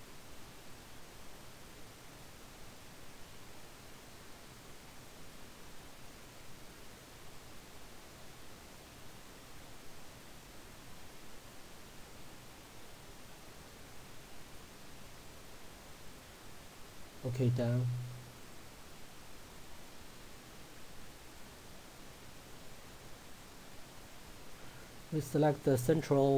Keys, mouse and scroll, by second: 18.5 click, 22.2-22.8 scroll up 1, 23.4 click.